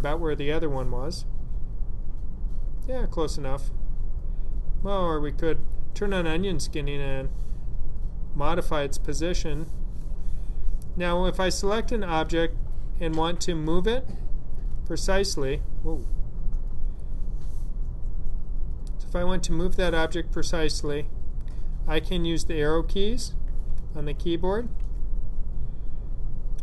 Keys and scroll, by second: 22.5 Down, 22.8 Down, 23.2 Down, 23.8 Right, 24.6 Right.